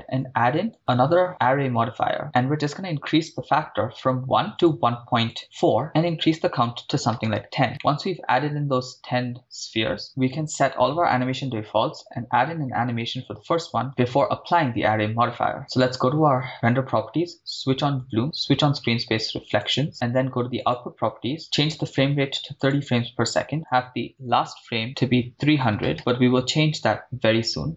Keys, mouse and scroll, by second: 1.6 click, 3.2-3.7 middle drag, 4.8 click, 5.9 click, 7.3 click, 7.7-8.4 scroll down 3, 8.4-10.0 middle drag, 15.8 click, 19.5 click, 19.7 click, 20.8 click, 22.8 click, 23.5-26.8 drag, 25.7 9, 25.9 BackSpace, 25.9 0.